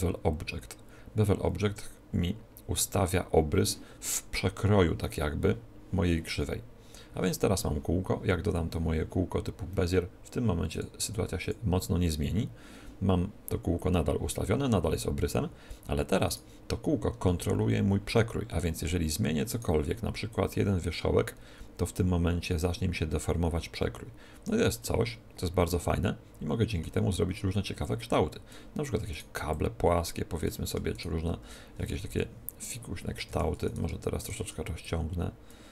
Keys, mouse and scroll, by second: 10.7-12.5 drag, 16.2-18.1 right drag, 17.1 Tab, 19.4-21.3 right drag, 20.2-22.0 drag, 24.7-26.5 middle drag, 27.7-31.3 drag, 29.1-32.6 right drag, 31.5 s, 33.0 s, 33.6-35.7 right drag, 34.7-35.7 drag.